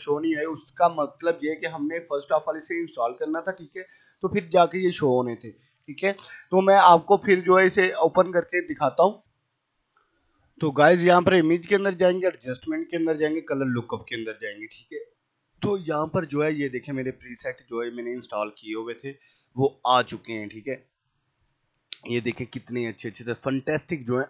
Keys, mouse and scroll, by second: 0.2 click, 4.9 click, 9.3 F9, 10.6-20.1 drag, 20.1-24.2 scroll down 1.